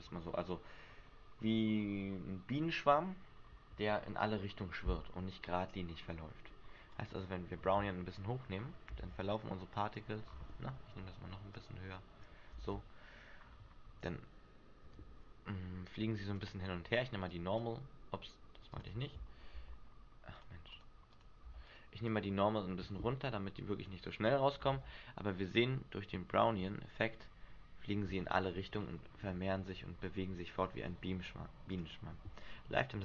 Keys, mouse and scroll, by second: 6.9 click, 8.6-8.9 scroll down 6, 8.9 alt+a, 10.2-10.6 scroll up 5, 10.7 Escape, 11.5 click, 12.5 alt+a, 13.3-13.7 scroll down 3, 14.1-14.5 scroll down 1, 14.9 Escape, 15.9 click, 17.3 click, 21.1 click, 22.0 click, 24.4 scroll up 1, 24.7 alt+a, 26.3 shift+middle click, 26.6-27.1 scroll up 4, 28.4 Escape, 28.8-30.0 scroll up 5, 31.7 click.